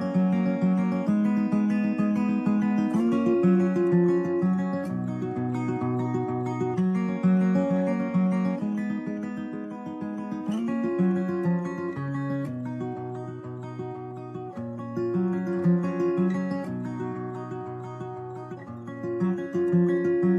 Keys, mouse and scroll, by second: 1.1 Tab, 2.7 t, 5.2 a, 6.5 a, 11.1 middle click, 11.8 shift+a, 14.0 x, 14.1 shift+a, 19.2 g, 19.7 click.